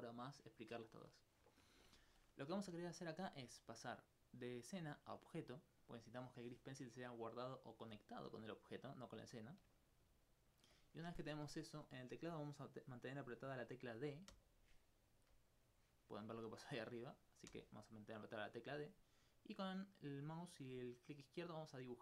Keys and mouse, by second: 2.5 middle click, 5.5 click, 10.4 alt+click, 14.3-14.9 d, 17.5 d, 18.0 d, 21.7 click.